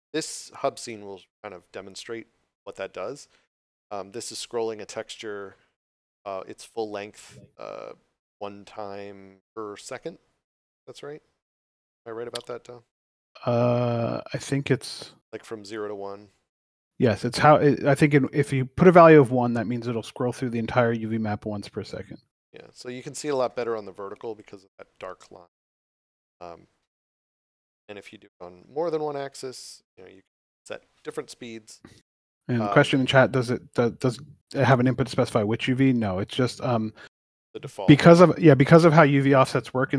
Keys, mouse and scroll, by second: 0.3 s, 10.6 click, 20.5 click, 22.5 d, 23.1 w, 26.7 s, 27.6 click, 34.1 s.